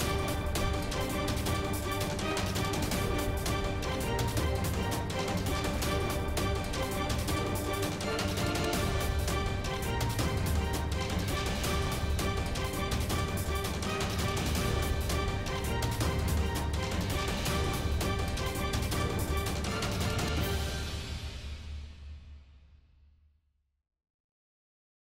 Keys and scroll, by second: 0.0-0.3 typing, 0.5 shift+Return.